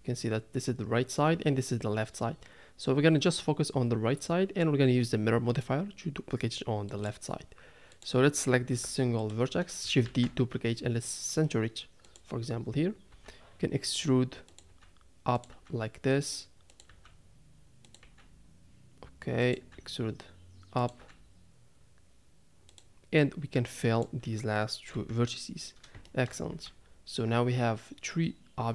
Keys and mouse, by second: 8.7 g, 10.0 shift+d, 14.1 e, 14.9 e, 16.1 e, 16.9 e, 18.0 e, 20.0 e, 21.3 e, 23.2 click, 24.9 f, 26.1 shift+middle click, 26.5 a.